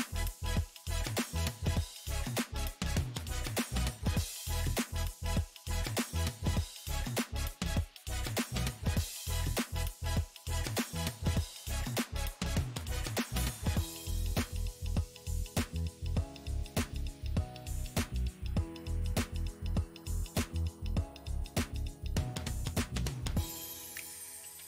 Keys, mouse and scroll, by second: 0.9-4.9 drag, 6.2-8.5 shift+drag, 8.5-21.2 middle drag, 21.2-24.6 drag.